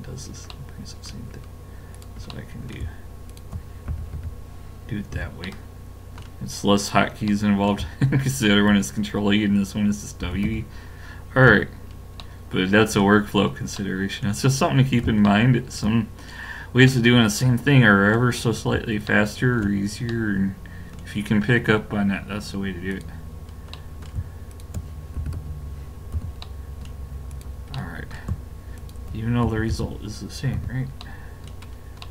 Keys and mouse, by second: 0.5 middle click, 2.0-5.1 drag, 3.9 w, 5.1 a, 6.8-10.2 drag, 10.2 w, 11.5 a, 11.8-13.5 middle drag, 15.5-17.3 middle drag, 22.9-26.4 drag, 25.2 w, 26.2 a, 27.3-30.6 drag, 29.5 w, 30.6 a.